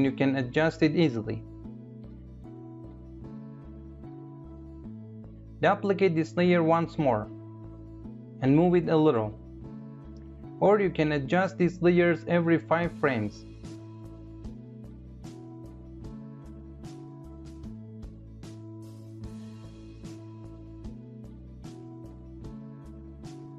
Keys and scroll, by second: 5.3 ctrl+d.